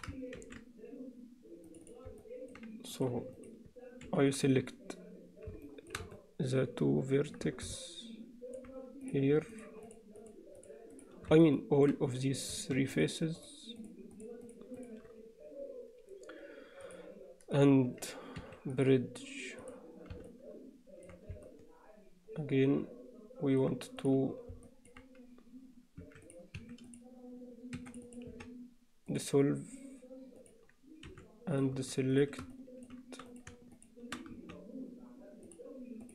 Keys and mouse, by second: 0.4 ctrl+r, 2.2 alt+middle click, 3.0 click, 4.1 3, 5.7 alt+shift+middle drag, 6.2-7.4 alt+middle drag, 7.8 middle click, 9.8 shift+click, 11.4 alt+middle click, 13.8 shift+click, 14.5 shift+click, 14.8 shift+click, 16.9-18.6 drag, 18.8-19.8 drag, 20.3 alt+middle click, 20.5 alt+click, 21.5-23.6 alt+middle drag, 24.6 alt+click, 26.0 s, 26.6 Escape, 26.9 click, 27.8 2, 27.9 click, 28.3 x, 31.1 3, 32.6 alt+middle click, 33.3 click, 34.4 x.